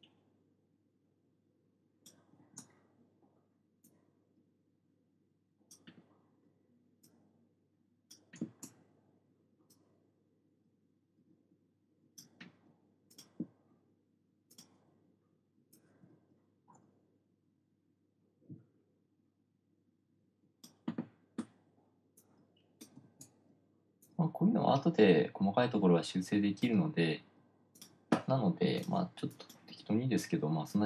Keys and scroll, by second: 2.8 super+z, 8.8 super+z, 23.4 super+z.